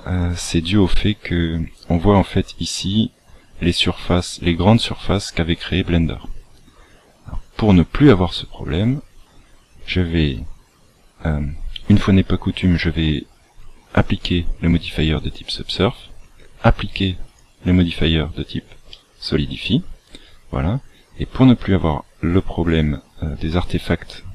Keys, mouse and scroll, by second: 7.6 click, 15.1 click, 18.9 middle click.